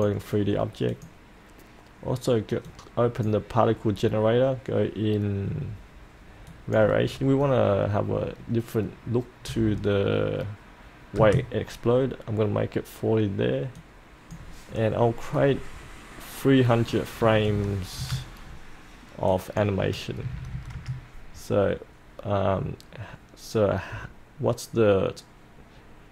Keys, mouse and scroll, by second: 9.4 KP_4, 9.6 KP_0, 13.7-15.0 drag, 17.2 KP_3, 17.3 KP_0, 18.0 KP_0, 19.2 click, 20.2 KP_3, 20.3 KP_0.